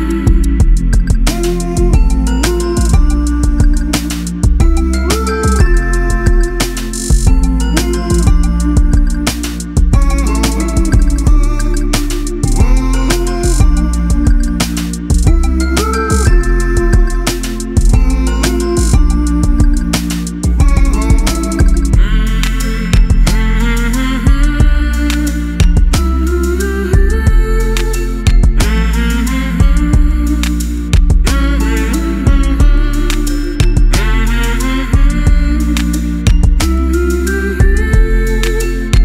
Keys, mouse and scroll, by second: 2.4 click, 6.9 alt+click, 8.9 alt+click, 10.5 click, 11.8 click, 13.1 click, 14.6 click, 15.7 click, 17.3 click, 18.6 shift+click, 19.2 right click, 22.6 click, 24.4 right click, 25.8 click, 30.2 ctrl+t, 31.5 click, 34.8 Return, 35.5 click.